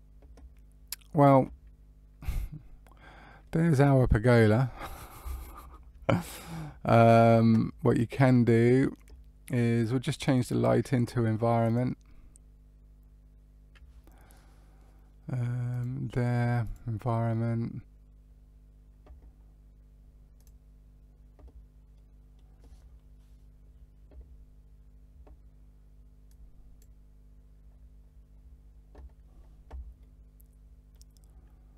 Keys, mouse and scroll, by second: 3.4 middle click, 5.3 shift+middle click, 6.3 click, 10.3 click, 11.6 click, 15.6 click, 20.6 click, 21.9 middle click, 22.7-23.4 scroll down 2, 26.2 click, 27.6-29.2 scroll up 4, 29.2-29.9 scroll up 1, 29.9 middle click.